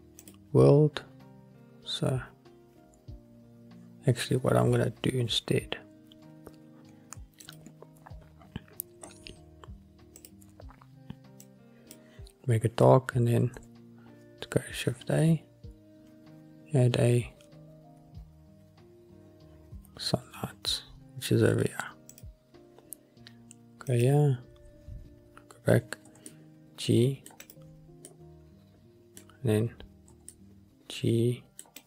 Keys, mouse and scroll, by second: 0.4-4.0 drag, 7.6 click, 8.5-10.3 scroll up 6, 10.3 click, 10.3 scroll up 1, 14.8 shift+a, 24.0 click, 25.2-26.2 scroll down 1, 26.2 scroll down 1, 26.2 g, 26.4 middle click, 27.5-28.2 drag, 28.2-29.5 middle drag, 30.2 g, 30.5-31.2 middle drag.